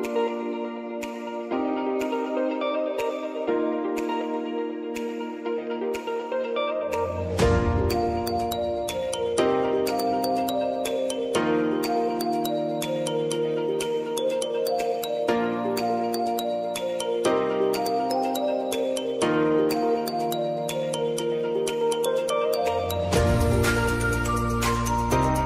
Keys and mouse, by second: 0.7 click, 3.0 click, 6.4-19.8 drag, 19.8 -, 21.3-25.4 drag.